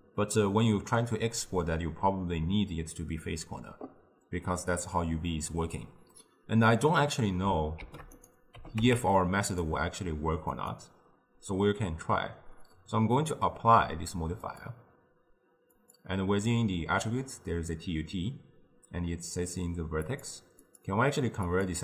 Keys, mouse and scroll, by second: 7.9 shift+d, 8.6 g, 10.6-13.8 drag, 15.8 click, 20.1-21.8 drag.